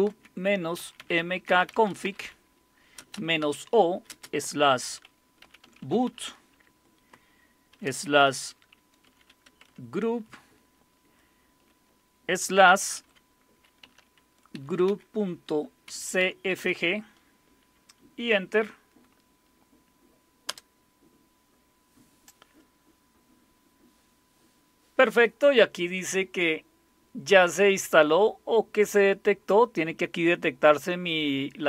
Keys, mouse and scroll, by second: 0.0-6.6 typing, 7.8-10.2 typing, 12.7-17.1 typing, 20.5 Return, 27.8-31.6 drag.